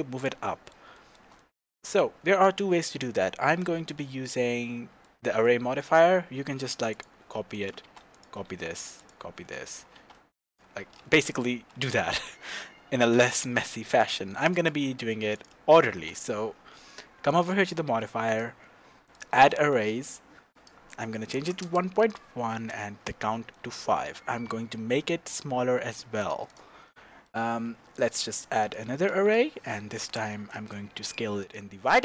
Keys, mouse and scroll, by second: 0.2 click, 1.7-2.7 scroll down 2, 6.7 shift+d, 7.5 click, 7.8 shift+d, 8.2 click, 8.5 shift+d, 9.5-10.6 drag, 9.9 shift+d, 11.0 ctrl+z, 14.1-14.6 shift+middle drag, 14.6 click, 14.9 scroll up 1, 15.3 click, 15.6 shift+scroll up 1, 15.7-17.3 shift+middle drag, 17.3 click, 17.7-18.3 shift+middle drag, 18.3-19.6 drag, 19.6 middle click, 20.5-23.5 drag, 21.7 KP_Enter, 22.7 KP_Enter, 23.5-26.3 middle drag, 24.7 s, 26.5 click, 26.8-27.9 middle drag, 27.9-31.3 drag, 29.1-30.0 scroll down 2, 30.6 KP_Enter.